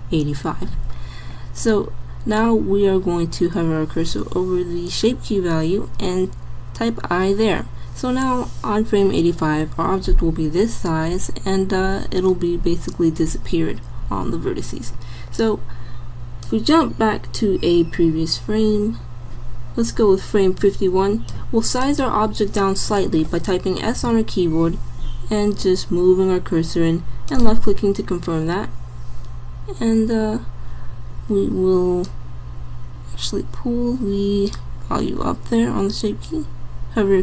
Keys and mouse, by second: 7.0 i, 16.5-18.3 drag, 21.8-23.7 drag, 24.0 s.